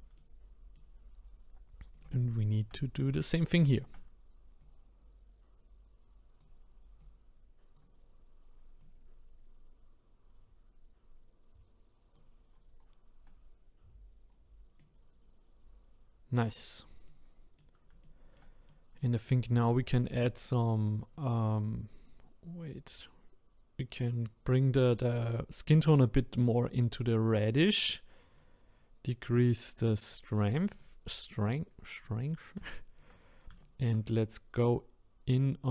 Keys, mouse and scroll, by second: 1.9 click, 2.4 shift+middle click, 2.7-3.4 scroll up 5, 3.4-4.6 shift+middle drag, 4.6-8.0 drag, 8.0-8.8 scroll down 1, 8.8-11.8 drag, 12.5-14.3 scroll down 3, 14.3-14.8 scroll down 1, 14.8-16.7 middle drag, 16.7-17.0 scroll down 2, 17.0-21.1 middle drag, 21.1 click, 28.3-30.8 drag, 31.6-32.6 scroll up 1, 32.6-34.7 shift+middle drag, 34.7-35.7 scroll up 1.